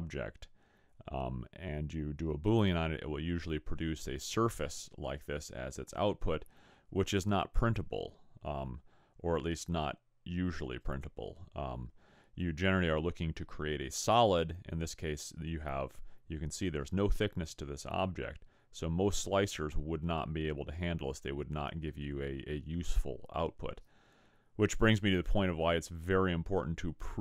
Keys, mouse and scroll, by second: 0.9 middle click, 1.4 middle click, 2.1 middle click, 2.6 middle click, 9.9-12.1 scroll up 2, 12.1-12.9 scroll down 2.